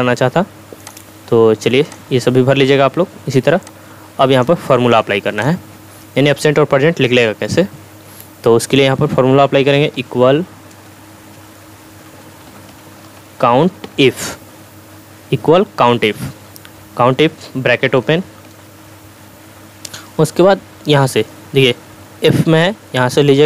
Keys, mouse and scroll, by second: 10.0 =, 11.8-14.3 typing, 18.5 typing.